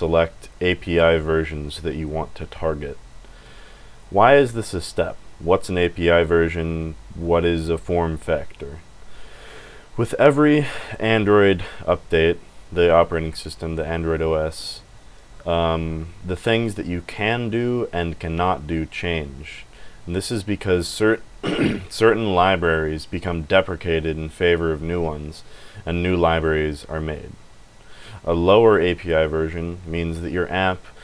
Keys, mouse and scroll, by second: 25.7 scroll down 1.